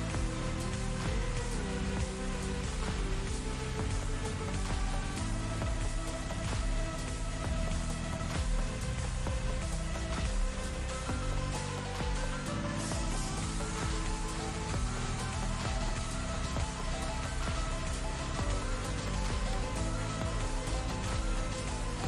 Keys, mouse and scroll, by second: 2.7-3.3 drag, 4.4 click, 6.8 click, 12.1 right click, 12.7 click, 17.7 ctrl+z, 20.3 click, 21.2 ctrl+z.